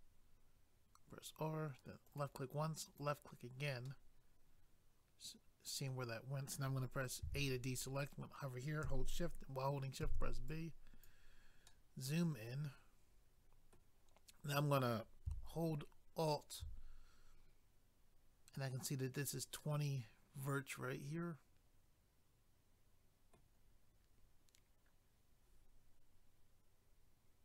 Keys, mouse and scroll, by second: 2.1 click, 2.2 click, 2.8 click, 3.0 click, 3.9 middle click, 7.2 a, 10.5 click, 11.6 middle click, 16.2 alt+click, 16.4 alt+click, 19.6 middle click.